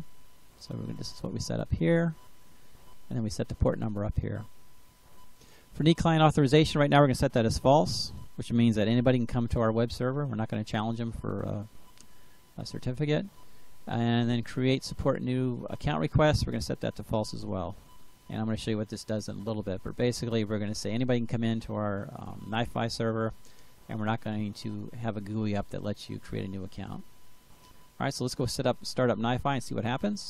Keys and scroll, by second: 7.2-9.3 typing, 16.5-18.4 typing.